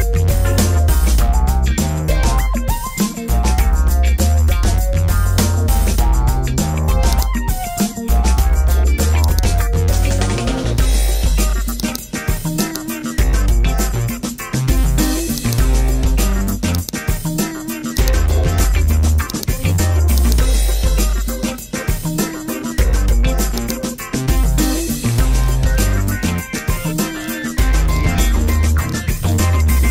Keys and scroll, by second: 24.6 BackSpace.